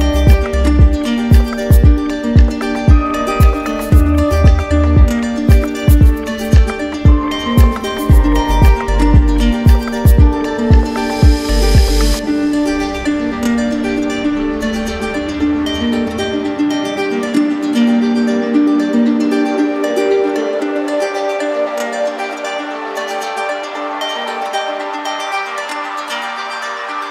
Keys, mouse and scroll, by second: 2.0 click, 4.4 click, 5.1 right click, 5.7 right click, 6.1 shift+right click, 6.8 alt+right click, 8.4 right click, 10.0 right click, 11.9-12.9 drag, 12.9-13.7 typing, 14.5-15.5 right drag, 15.6-16.7 right drag, 19.7-20.8 drag, 21.6 click, 24.8 click, 26.7 click.